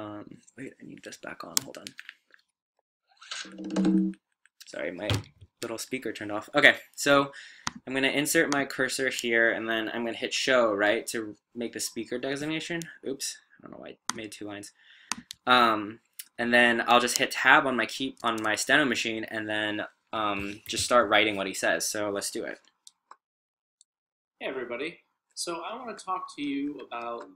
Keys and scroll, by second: 23.3 typing.